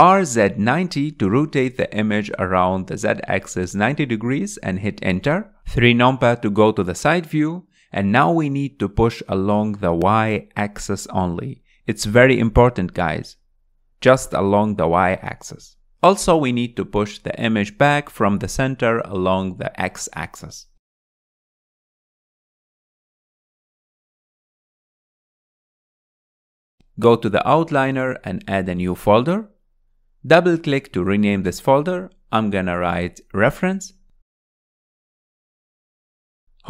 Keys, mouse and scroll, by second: 0.6 r, 5.1 KP_3, 8.4 click, 11.4-12.0 scroll up 4, 12.5 click, 15.7 scroll down 4, 16.0-17.8 middle drag, 17.8-18.7 drag, 22.5-23.3 middle drag, 23.3 scroll down 3, 23.5 middle click, 24.4 scroll up 3, 24.9-25.9 shift+middle drag, 25.9 click, 27.2 click, 30.5-32.3 drag, 33.2-36.3 drag.